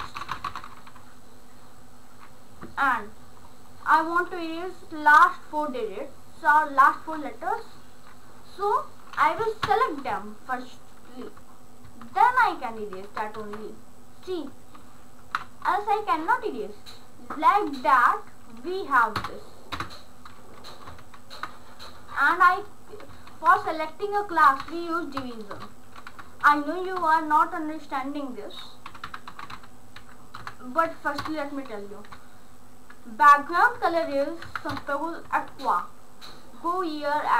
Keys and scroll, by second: 0.0-1.1 typing, 11.9 shift+Left, 13.4 BackSpace, 15.2 ctrl+a, 15.6 BackSpace, 19.2 Return, 19.7 space, 20.7 BackSpace, 21.0 shift+[, 22.2 Return, 23.4 ctrl+a, 23.6 Delete, 24.3 ., 24.6 l, 25.6 Return, 26.4 shift+[, 27.0 Return, 28.7-30.4 typing, 31.3 Return, 33.8 Down, 34.5 Up, 34.7 Return, 35.5 ctrl+s.